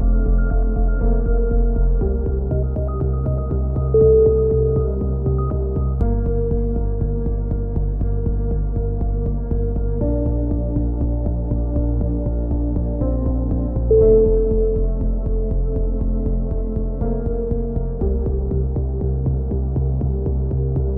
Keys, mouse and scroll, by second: 0.1 a, 1.5 click, 4.4 ctrl+KP_7, 4.9 z, 5.6 click, 5.8 click, 14.5 z, 14.7 click, 15.1 z, 17.0 ctrl+r, 19.3 middle click, 19.9 click, 19.9 c, 20.4 click, 20.5 middle click.